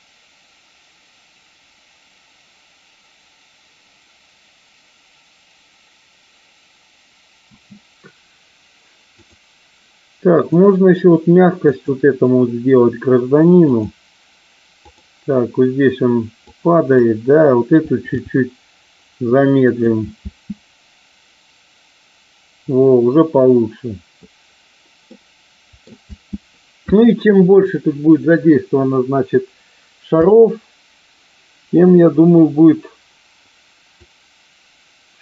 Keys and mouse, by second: 7.5 space, 9.0 click, 10.4 click, 11.5 click, 13.5 click, 14.8 click, 16.4 click, 18.2 g, 19.7 click, 20.3 space, 25.0 middle click, 25.9 space, 30.0 KP_0, 33.9-35.2 drag.